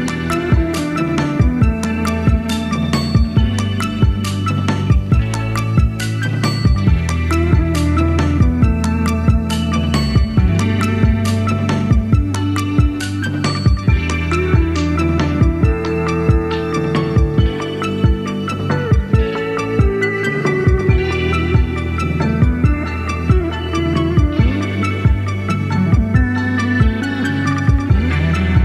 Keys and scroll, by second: 5.7 typing, 10.7 super+c, 10.9 super+v, 15.1 super+c, 15.2 super+v, 16.1 f.